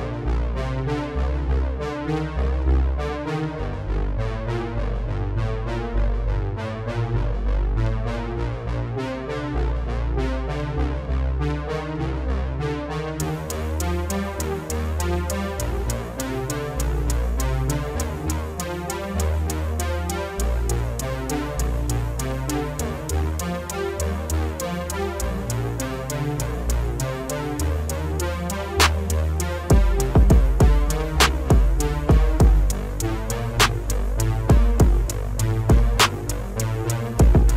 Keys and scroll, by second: 18.1 ctrl+s.